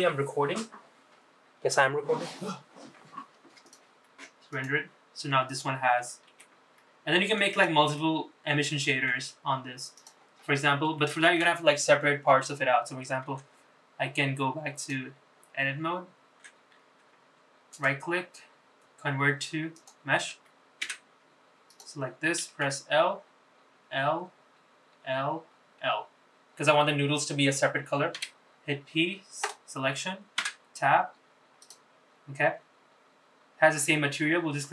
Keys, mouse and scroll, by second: 3.4 click, 4.3 click, 5.2 click, 6.0 g, 7.7-8.8 middle drag, 9.7 click, 10.1-10.7 scroll up 4, 10.7 shift+middle click, 12.4 scroll down 2, 13.0 Tab, 14.5 click, 16.1 Tab, 17.4-19.6 right drag, 20.6 Tab, 21.4 click, 22.4 l, 23.5 l, 25.5 l, 27.9 p, 30.1 Tab, 31.3 click.